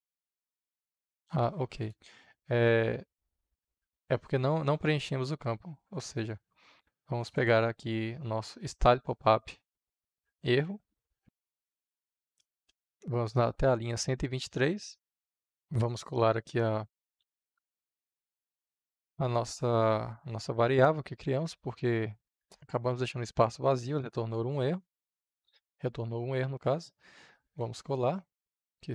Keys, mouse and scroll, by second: 1.6 click, 7.0-9.2 drag, 9.8 click, 10.5 ctrl+c, 15.5 Return, 15.7-16.9 drag, 16.9 s, 17.2 l, 19.2 f, 20.4 shift+., 23.9-27.3 drag, 27.5 ctrl+v.